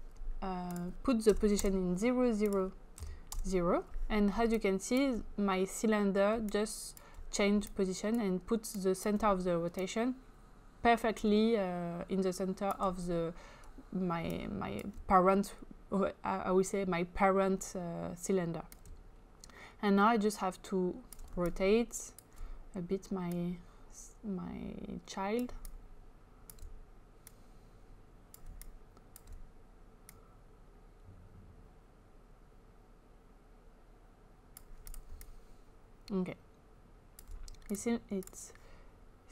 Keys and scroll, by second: 1.3 0, 1.7 Return, 3.1 0, 3.4 Return.